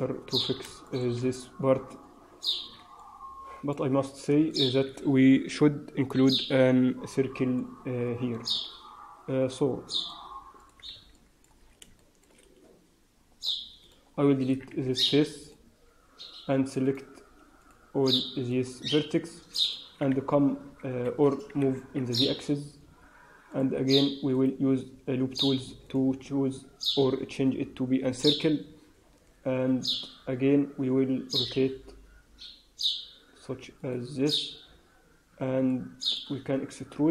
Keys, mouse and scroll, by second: 0.2 Tab, 0.3-0.8 scroll down 4, 0.8 shift+middle click, 2.5 Tab, 2.9 middle click, 3.9 scroll up 4, 4.4 shift+middle click, 7.4 middle click, 9.9 click, 10.9 click, 11.1 middle click, 11.7 scroll up 2, 11.9 shift+middle click, 12.3 scroll up 1, 13.7 click, 14.3 click, 14.9 x, 16.7 click, 17.5 click, 18.3 shift+click, 18.8 click, 19.5 shift+click, 20.0 w, 20.8 Escape, 21.5 g, 24.3 right click, 27.0-27.4 scroll down 2, 27.4 scroll up 2, 29.1 KP_3, 30.3 scroll up 2, 31.3 r, 35.6 middle click, 36.3-36.9 scroll up 1, 36.9 e.